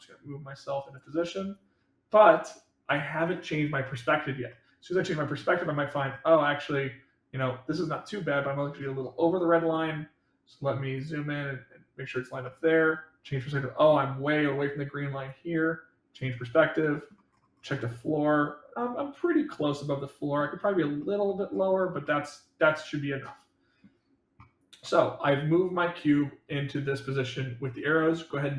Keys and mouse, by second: 1.4-2.8 drag, 4.4-5.3 middle drag, 6.3-7.6 middle drag, 11.0-12.0 drag, 12.4-13.8 middle drag, 15.2-16.1 drag, 16.5-17.1 middle drag, 17.7-20.3 middle drag, 21.0 middle click, 22.0-23.8 middle drag, 24.8-25.5 middle drag.